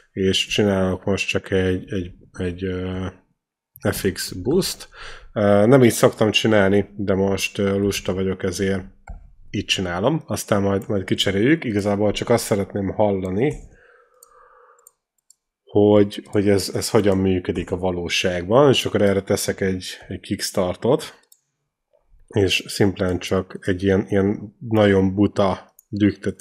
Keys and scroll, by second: 0.7 F2, 1.9-5.3 typing, 8.1 alt+Left, 9.3 alt+Right, 11.4 F2, 13.8 Return, 16.2 F2, 17.8 Return, 19.7 k.